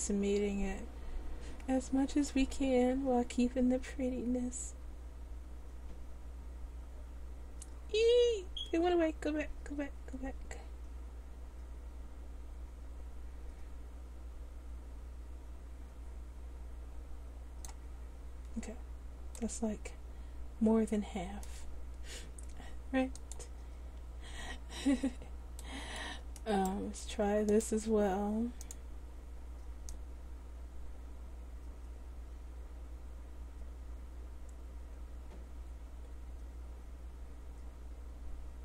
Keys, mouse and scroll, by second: 19.5-20.9 middle drag, 23.2-25.7 drag, 28.8-31.9 drag.